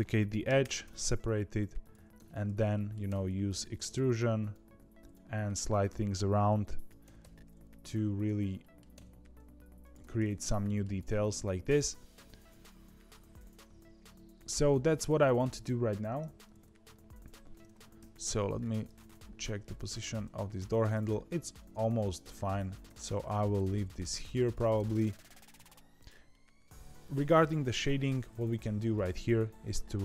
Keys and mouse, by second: 0.4 p, 0.8 Tab, 1.7 click, 2.1 Tab, 2.4 a, 2.7 middle click, 3.0 e, 4.6 2, 5.0 click, 5.7 click, 6.8 click, 7.0 g, 8.3 a, 8.5 middle click, 8.9 e, 9.9 Tab, 10.4 middle click, 11.6-14.0 middle drag, 14.6 click, 17.9 KP_3, 18.4 z, 19.8 Tab, 22.7 ctrl+z, 22.8 a, 23.2 g, 24.7 Tab, 25.1 middle click, 25.5 z, 25.9 click, 26.2 middle click, 28.9 click.